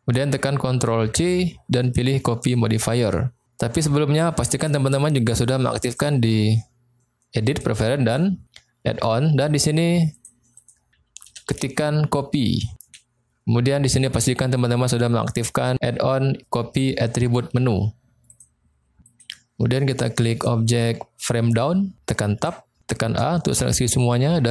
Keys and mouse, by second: 1.0 ctrl+c, 5.9-8.4 drag, 19.2 click, 20.2 click, 22.4 Tab, 23.1 a.